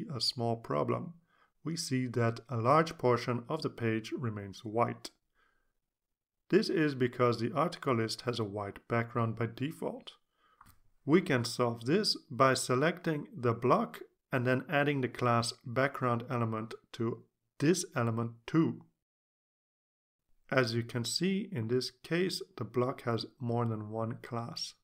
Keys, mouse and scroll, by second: 14.8 click, 16.2 click, 16.6-20.9 typing.